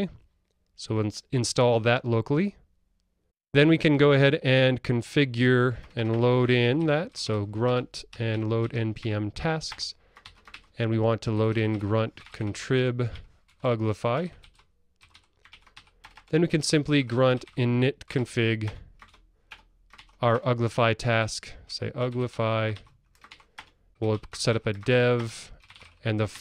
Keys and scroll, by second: 7.8 Return, 18.8 Return.